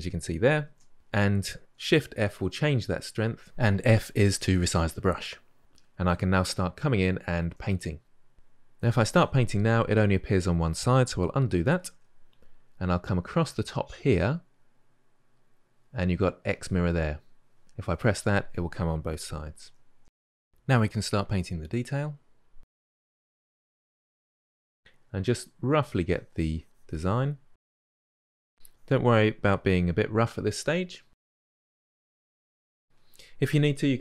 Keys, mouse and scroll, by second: 0.5 ctrl+z, 0.9 ctrl+z, 1.6 shift+f, 4.6 f, 5.6-8.5 middle drag, 8.5-11.5 drag, 11.6 ctrl+z, 13.7-16.3 middle drag, 16.3 click, 17.6-19.3 drag, 19.3 ctrl+z, 20.1 f, 20.3-20.8 drag, 21.8 click, 23.2 click, 23.5 middle drag, 23.8 click, 24.4 middle click, 24.5-24.9 drag, 24.9 middle click, 25.2 click, 25.3 middle drag, 25.5 drag, 25.6-27.3 middle drag, 27.3 click, 27.3-27.8 ctrl+middle drag, 27.8 drag, 28.0 middle click, 28.1 drag, 28.3-28.6 middle drag, 28.6-29.1 drag, 29.1-30.7 middle drag, 30.7 drag, 30.9 middle drag, 31.2 drag, 31.3 middle click, 31.5 drag, 31.8 middle drag, 32.1-32.6 drag, 33.9 KP_Divide.